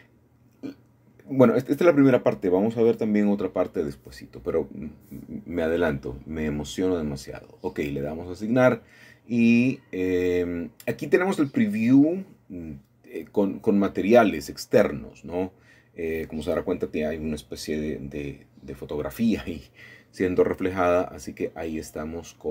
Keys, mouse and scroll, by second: 0.5 shift+middle click, 0.7 shift+middle click, 0.9 shift+middle click, 1.1 shift+middle click, 1.7-2.7 shift+middle drag, 2.8 shift+middle click, 3.9-4.9 shift+middle drag, 7.5 click, 11.3 middle click, 11.8 shift+middle click, 12.8 shift+middle click, 13.3-14.3 scroll up 2, 15.7 shift+middle click, 16.4 shift+middle click, 18.7 middle click, 19.9-20.7 drag, 21.4-22.5 shift+middle drag.